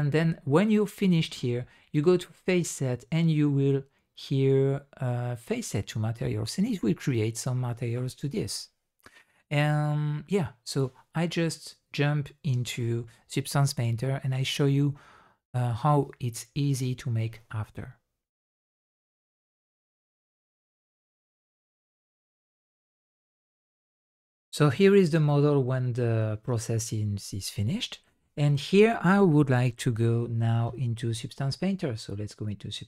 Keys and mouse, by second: 2.2-6.5 drag, 24.6 middle click, 25.5-30.6 middle drag.